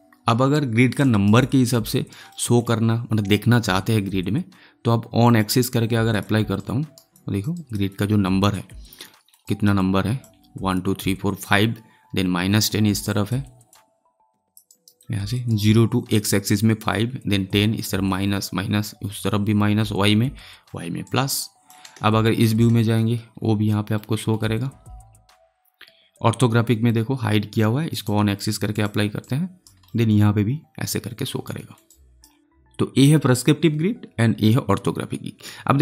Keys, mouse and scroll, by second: 1.0 alt+right click, 1.3 alt+click, 2.2 alt+middle click, 5.2 click, 6.5 alt+right click, 7.1 alt+click, 7.5 alt+right click, 7.8 alt+click, 9.0 alt+middle click, 9.4 alt+right click, 9.7-13.0 alt+drag, 13.1 alt+click, 13.6 alt+click, 14.9 alt+middle click, 15.3 alt+right click, 21.0 alt+right click, 21.3 alt+click, 21.9 space, 23.0 scroll down 1, 23.9-27.0 alt+middle drag, 27.8 click, 29.3 alt+right click, 29.9 alt+middle click, 31.4 alt+middle click, 31.8-34.4 alt+right drag.